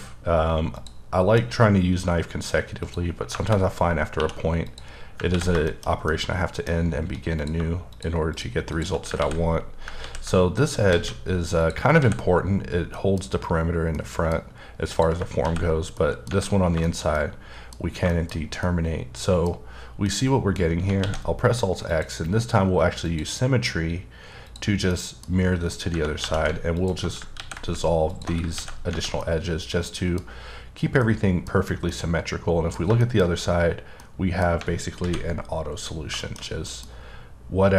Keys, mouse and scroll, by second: 0.7 click, 2.8 click, 3.3 KP_Enter, 3.9 scroll down 2, 4.2 2, 4.7 click, 5.3 ctrl+x, 5.6 shift+middle click, 6.8-7.4 scroll up 1, 7.4 click, 8.3 shift+double click, 8.7 shift+click, 9.2 ctrl+x, 10.0 ctrl+z, 11.1 alt+a, 11.6 click, 12.0 ctrl+x, 12.9 middle click, 14.0 middle click, 14.5 scroll up 1, 14.9 click, 15.4 ctrl+x, 16.0 middle click, 16.6 scroll down 3, 16.8 middle click, 17.2 double middle click, 17.8 scroll down 1, 18.3 scroll down 1, 18.6 middle click, 20.1 middle click, 21.0 alt+x, 21.9 click, 23.0 click, 24.5 click, 24.9 middle click, 25.7 scroll up 1, 26.2 2, 26.8 alt+click, 27.4 ctrl+x, 28.1 alt+click, 28.5 ctrl+x, 28.9-29.2 scroll down 1, 29.2-30.5 middle drag, 30.7-31.0 scroll down 2, 31.0 middle click, 31.9 middle click, 33.4-34.0 scroll up 1, 34.0 middle click, 35.0 alt+v, 35.8 click, 36.2 shift+middle click, 36.4 scroll down 2, 36.7 middle click, 36.8 scroll up 1.